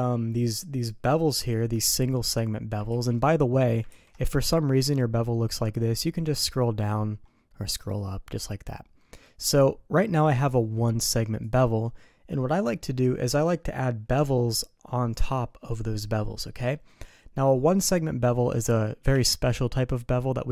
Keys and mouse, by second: 2.9 ctrl+z, 3.9 ctrl+b, 19.0 n.